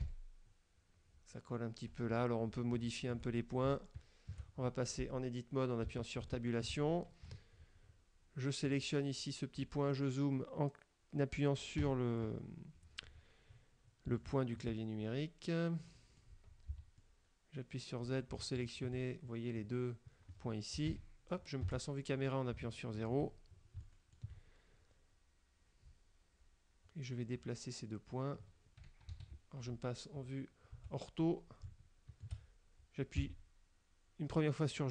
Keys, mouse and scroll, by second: 0.1 F12, 2.0 Escape, 2.6 scroll up 2, 2.9 shift+middle click, 3.4-3.7 shift+scroll up 1, 3.7 shift+middle click, 6.0 Tab, 6.4 shift+middle click, 7.4 KP_Decimal, 8.0 scroll up 1, 8.7 right click, 11.9 KP_Decimal, 12.6-13.5 scroll down 6, 14.3 shift+click, 15.3-16.5 drag, 16.8 z, 17.1 click, 17.1-18.4 middle drag, 18.7 shift+right click, 21.0 KP_1, 21.7 KP_0, 22.7 shift+middle click, 23.7 scroll up 2, 24.0 shift+middle click, 24.5-24.9 shift+scroll up 2, 29.2 KP_5, 31.3 shift+scroll up 2, 31.7 shift+middle click, 33.3 g.